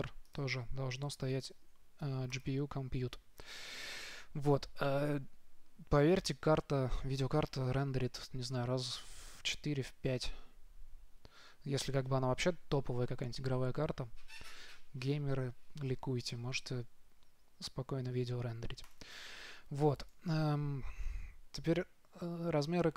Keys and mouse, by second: 0.6-2.4 drag, 19.2-22.2 drag.